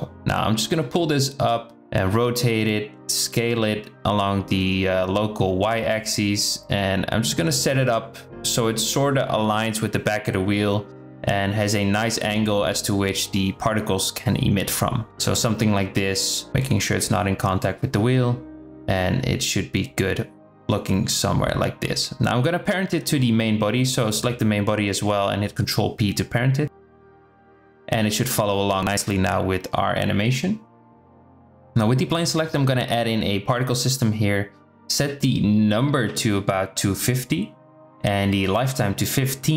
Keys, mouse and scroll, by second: 1.2 KP_0, 3.4 r, 10.1 g, 12.2 s, 16.6 s, 18.8 g, 21.9-23.9 drag, 26.7 ctrl+p, 30.8-31.7 drag, 34.3 click, 36.0-38.9 drag, 39.1-39.5 drag.